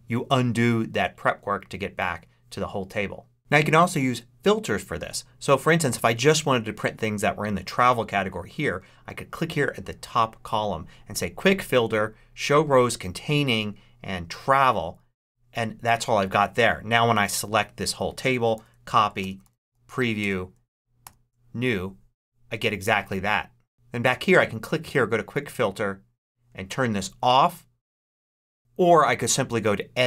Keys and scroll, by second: 18.4 super+c, 19.4 super+p, 19.5 r, 20.6 super+Return, 20.9 super+n.